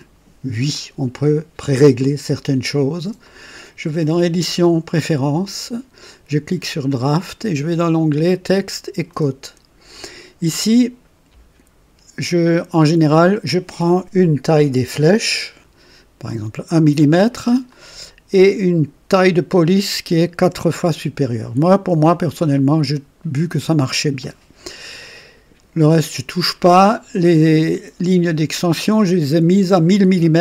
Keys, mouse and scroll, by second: 3.1 click, 4.9 click, 6.8 click, 8.9 click, 12.7 click, 15.3 KP_1, 17.6 click, 20.2 KP_4, 22.0 click.